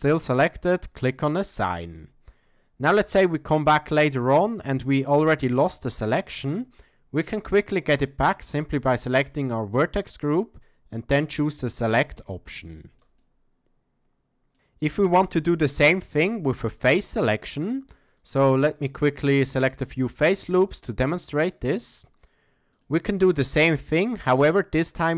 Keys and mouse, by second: 3.0 a, 3.1 a, 3.8 middle click, 4.6 z, 6.0 shift+middle click, 6.6-8.3 middle drag, 9.2 click, 11.9 click, 12.8 shift+middle drag, 13.2-14.5 middle drag, 15.1 a, 15.2 a, 16.8 click, 17.2 shift+middle drag, 17.9 ctrl+click, 18.5 shift+click, 18.9 middle click, 20.6 alt+click, 21.3 alt+shift+click.